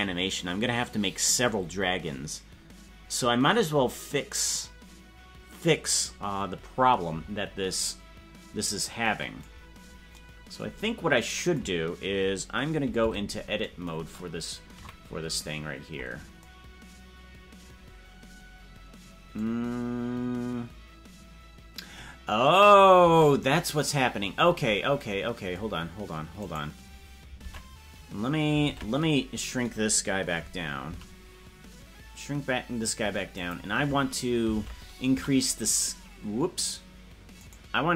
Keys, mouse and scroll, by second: 13.1 Tab, 14.8 KP_Decimal, 15.7-16.3 scroll down 9, 23.6 Tab, 24.2-24.9 scroll down 12, 26.6 right click, 27.5 ctrl+Tab, 30.9 s, 35.2 a, 36.8-37.9 right drag.